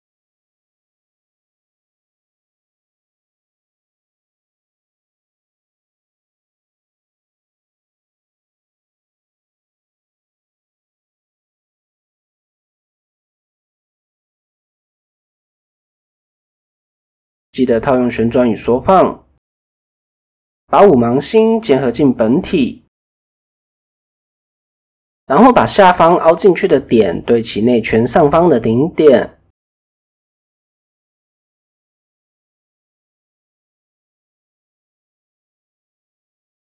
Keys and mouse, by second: 2.3 shift+middle drag, 4.0 Tab, 8.8 s, 10.8 Tab, 11.9-12.4 middle drag, 13.5 KP_1, 13.9 KP_3, 16.0 ctrl+a, 17.8 middle drag, 18.0 click, 18.8 shift+click, 20.1 ctrl+j, 20.7 KP_3, 21.3 Tab, 22.0 shift+middle click, 22.6 click, 23.0 middle click, 23.1 click, 23.4 middle click, 24.1 click, 24.6 click, 26.3 KP_1, 29.2 g, 31.0 shift+click, 32.2 shift+middle click, 32.6 middle click, 34.2 click, 35.0 shift+click, 35.6 click.